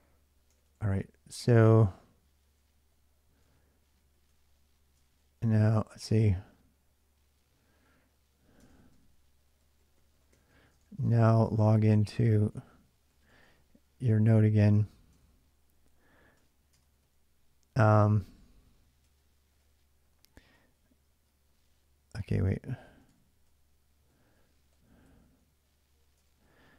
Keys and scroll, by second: 0.0-4.8 typing, 4.8 ctrl+[, 7.2 ctrl+j, 7.2-17.2 typing, 8.4 ctrl+[, 8.4 ctrl+j, 18.8-26.7 typing.